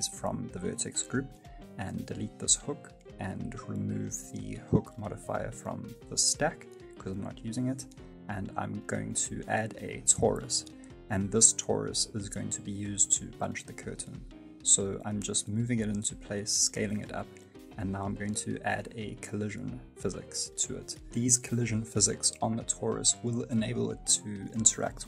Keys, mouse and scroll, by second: 0.0 Tab, 0.5 right click, 2.3 Delete, 3.6 right click, 6.8 click, 6.9 middle click, 8.3 click, 11.4 scroll down 2, 11.7 middle click, 12.4 middle click, 12.8 g, 13.8 middle click, 14.4 s, 15.4 middle click, 21.4 click, 21.4 shift+middle click, 22.2 middle click, 23.5-24.2 scroll up 1, 24.5 click.